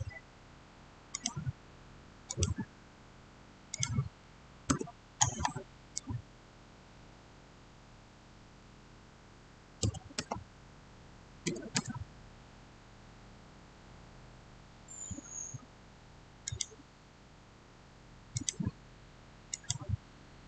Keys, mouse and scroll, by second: 1.0 click, 4.6 Return, 9.7 Return, 9.7-10.1 typing, 11.1-11.8 typing, 16.3 click.